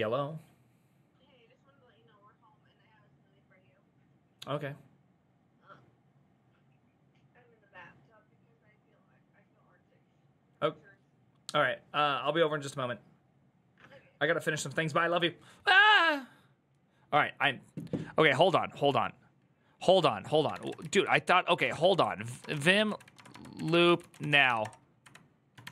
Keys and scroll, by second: 22.3-25.7 typing.